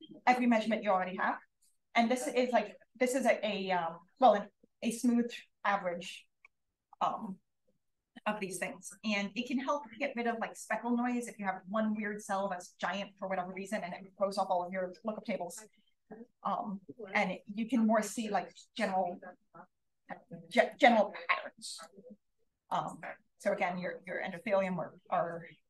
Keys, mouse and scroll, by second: 15.8-16.1 scroll up 1, 16.9-19.8 scroll up 2, 19.8-20.6 scroll up 1, 20.6-21.7 scroll up 1, 21.7-23.8 scroll up 1, 23.8-24.4 scroll up 1, 24.4-24.9 scroll up 1.